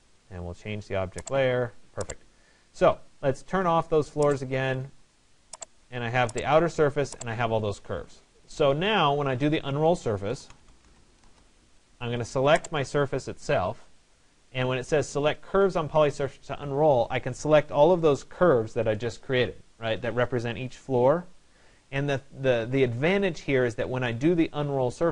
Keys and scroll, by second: 10.9 Return.